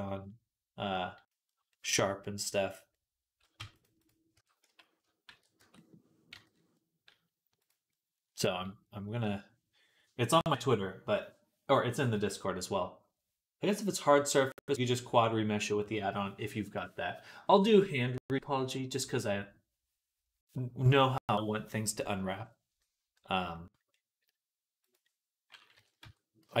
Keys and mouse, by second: 0.7-7.5 drag, 3.4 Tab, 3.6-7.5 middle drag, 3.6-26.6 right drag, 4.2 Tab, 4.5 a, 5.1 shift+n, 5.4 Tab, 6.2 /, 24.7 click, 24.7 middle click, 25.6 KP_3, 25.8 Tab, 26.2 z.